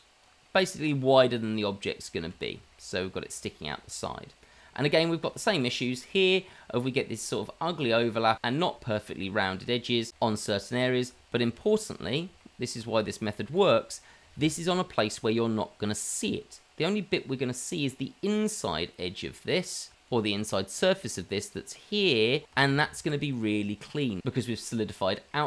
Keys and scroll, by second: 2.6 shift+z, 3.8 shift+z, 5.0 shift+z, 22.9 ctrl+z.